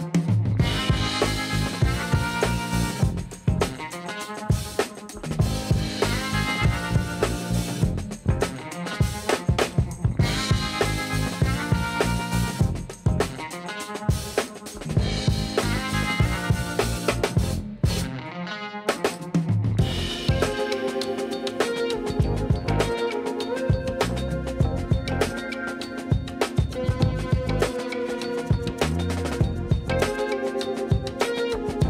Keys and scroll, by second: 0.5 alt+a, 8.2 Tab, 9.0 Tab, 13.4 ctrl+r, 15.2 3, 20.2 Tab, 27.4 alt+a.